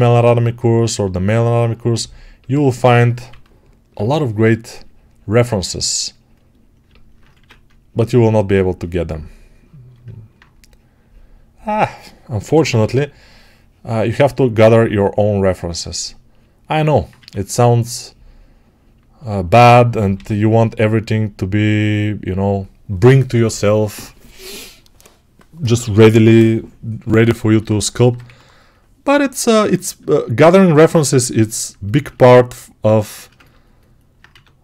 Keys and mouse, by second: 2.7 2, 3.2 [, 3.7 [, 7.2 1, 12.3 p, 12.5 ], 12.7 ], 17.0 1, 20.0 g, 27.4-34.6 alt+right drag, 28.1 2, 34.2 1.